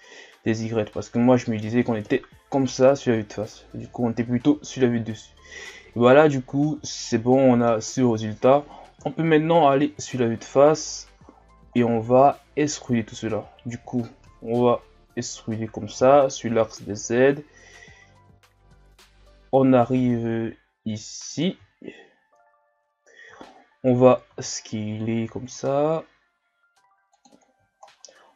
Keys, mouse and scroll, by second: 0.0-1.8 shift+scroll up 2, 2.0 KP_1, 5.2 scroll down 1, 6.9-8.0 middle drag, 8.0-9.0 scroll up 1, 9.0 KP_1, 10.0 scroll down 2, 10.7-11.7 scroll down 2, 11.7 shift+scroll up 3, 14.3 e, 22.4-23.4 shift+scroll down 3, 23.4 shift+scroll up 2, 24.3 shift+scroll up 5, 24.3 s, 27.8 shift+scroll up 2.